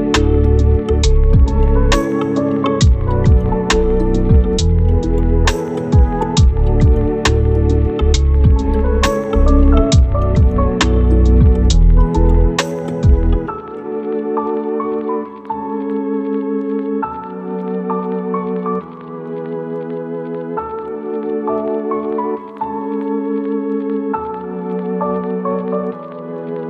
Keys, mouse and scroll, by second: 0.1 scroll down 1, 0.3 right click, 1.1-1.7 scroll up 2, 1.2 right click, 1.7 right click, 2.5-3.0 scroll up 1, 3.0 right click, 3.7-4.0 scroll down 1, 4.0-4.6 scroll up 2, 4.1 right click, 5.4 right click, 5.6 scroll down 1, 5.9 right click, 6.5 scroll up 1, 6.6 right click, 7.2-7.6 scroll up 1, 7.6 right click, 8.0 scroll down 1, 8.2 right click, 8.7-9.2 scroll up 1, 9.2 right click, 9.6-10.4 scroll up 1, 10.4 click, 12.3 scroll down 1, 12.8-13.9 right drag, 13.9 scroll up 1, 14.4 right click, 14.5 scroll down 1, 14.6-15.1 scroll up 1, 15.4 click, 17.3-17.8 scroll down 1, 17.8 right click, 18.1 click, 18.5 scroll down 1, 18.6 right click, 18.8 click, 19.3 right click, 19.8 click, 21.3-21.6 scroll down 1, 21.6 right click, 21.9-22.3 scroll up 1, 22.3 click, 22.5 right click, 22.9 click, 23.6 scroll down 1, 23.8 right click, 24.1 scroll down 1, 24.2-24.6 scroll up 2, 24.4 right click, 24.8 click, 25.6 scroll down 1, 25.7-26.3 scroll up 2, 25.8 right click, 26.3 click.